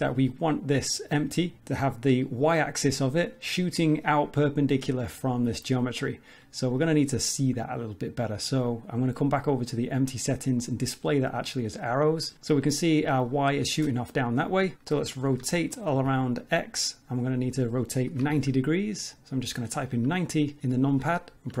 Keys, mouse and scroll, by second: 6.8 click, 9.3 click, 10.6 click, 14.4 middle click, 15.4 r.